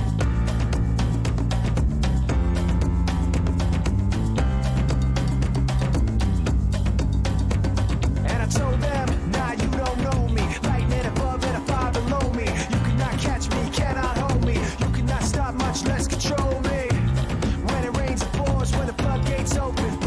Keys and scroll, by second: 3.9-4.7 typing, 16.2-20.0 typing.